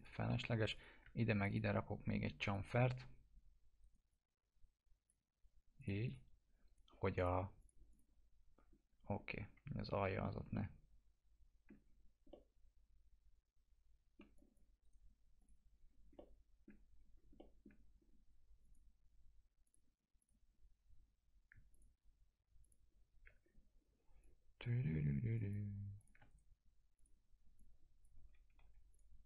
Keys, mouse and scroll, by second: 1.3 ctrl+click, 2.4 click, 3.8 right click, 4.1-5.3 drag, 8.7 scroll up 1, 9.4 F4, 10.2 scroll down 1, 10.5-11.7 alt+middle click, 11.8 scroll down 1, 12.3-14.1 alt+middle drag, 14.3 click, 14.8 right click, 15.3 click, 16.0 scroll down 1, 16.1-16.7 alt+middle click, 16.8 scroll down 1, 17.3 alt+middle click, 18.6 click, 21.7 ctrl+click, 23.4 scroll down 1, 24.2-24.8 click, 26.2 right click, 26.9 click, 28.3 alt+q, 28.9 click.